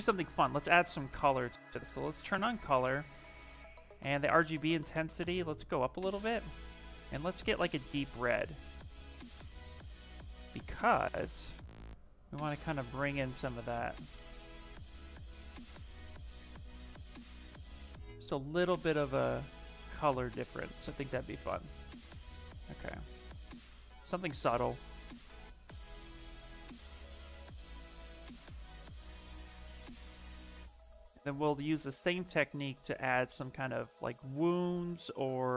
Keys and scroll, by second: 0.8 space, 9.5 ctrl+z, 10.0 space, 12.7 ctrl+z, 14.0 s, 14.4 space, 17.6 s, 19.6 ctrl+z, 19.8 ctrl+z, 20.5 ctrl+z, 20.9 s.